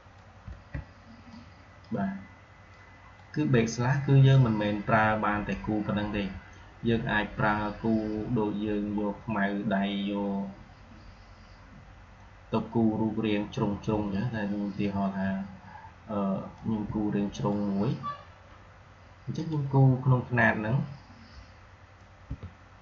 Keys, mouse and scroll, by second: 1.1-1.8 shift+drag, 3.4-5.1 drag, 8.9-10.5 scroll down 1, 13.2-13.5 scroll up 1, 16.4-19.2 drag, 21.9-22.8 alt+drag.